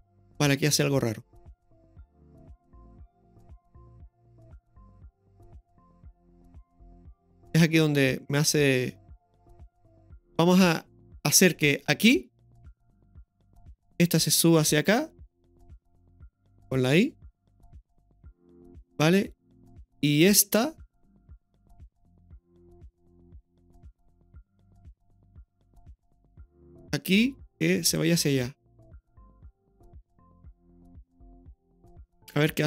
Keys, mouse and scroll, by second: 13.2-16.2 drag, 17.7 click, 17.7 i, 20.1 right click, 22.3-26.7 drag, 28.0-30.7 drag, 31.7 click, 31.8 i.